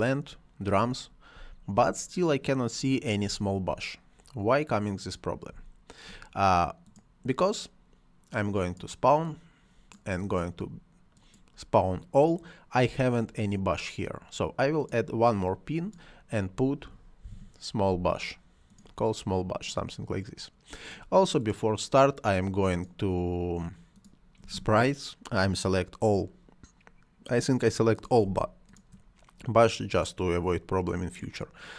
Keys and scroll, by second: 1.2 space, 3.2 space, 5.4 space, 16.5-17.7 typing.